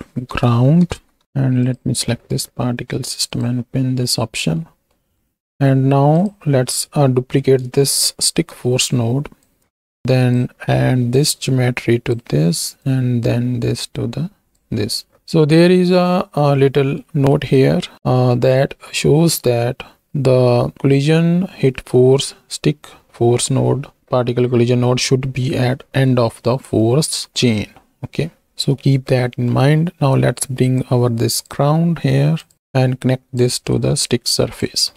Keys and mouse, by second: 1.6-3.4 drag, 4.0 middle click, 4.5 middle click, 6.2 click, 9.1 shift+d, 9.8 alt+p, 10.0 click, 11.2-12.1 drag, 13.0-14.9 drag, 16.5 middle click, 17.4 middle click, 25.7 middle click, 26.5 middle click, 28.2 middle click, 28.7-29.7 middle drag, 32.4 click, 33.0 click, 33.9 click.